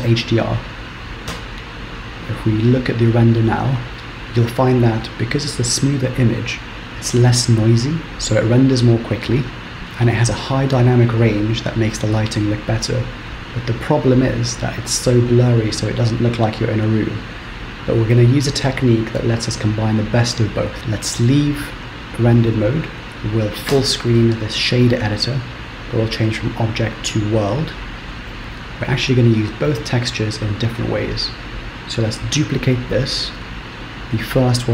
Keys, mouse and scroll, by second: 1.7 z, 21.8 z.